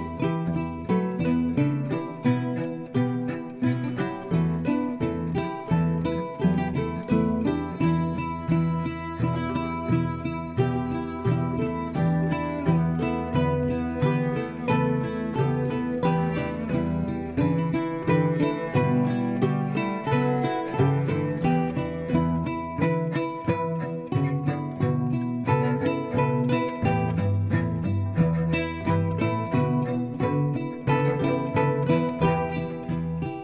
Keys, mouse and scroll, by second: 0.0 shift+middle click, 0.9 click, 1.7-2.9 middle drag, 2.9 shift+click, 3.6-5.5 middle drag, 5.5-7.7 right drag, 7.7 click, 8.7 g, 10.8 shift+click, 11.6 f, 11.8 click, 12.9 click, 13.6 shift+click, 14.8-18.3 right drag, 18.3-19.4 drag, 20.0 shift+click, 20.6 f, 20.9 click, 21.4 click, 22.0 shift+click, 22.5 f, 22.7 click, 22.9-24.0 middle drag, 24.0 click, 24.3-26.3 middle drag, 26.3 click, 26.7 click, 27.1 shift+click, 27.6 f, 28.2 click, 28.5 shift+click, 29.1 f, 29.4 click, 29.8 shift+click, 30.2 f, 30.5 click, 31.3 shift+click, 31.8 f, 32.1-32.8 scroll down 2, 32.4 click, 32.8 Tab, 33.1-33.4 middle drag.